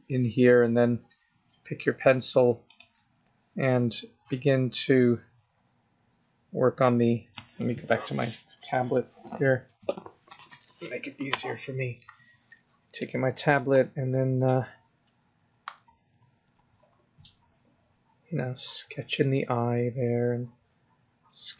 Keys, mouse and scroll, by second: 2.7 click, 4.4 scroll up 2, 5.3 scroll down 3, 13.7 click, 13.8 click, 14.9 click, 15.0 click, 15.1 click, 15.5 click, 15.9 click, 16.2 click, 16.6 click, 16.9 click, 17.4 click, 19.8 click.